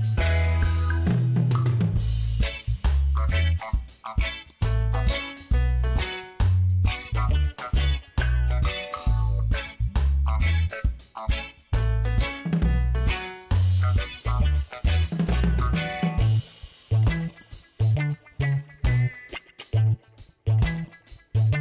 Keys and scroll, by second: 3.1 ctrl+t, 9.1 Return, 10.7 ctrl+l.